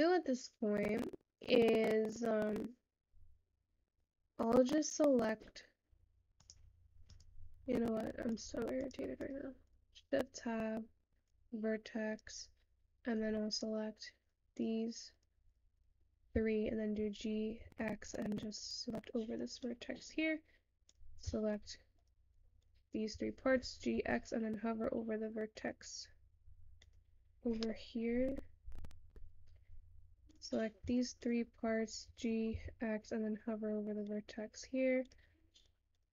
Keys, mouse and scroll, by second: 28.1-30.4 middle drag, 30.4 click, 34.1 g.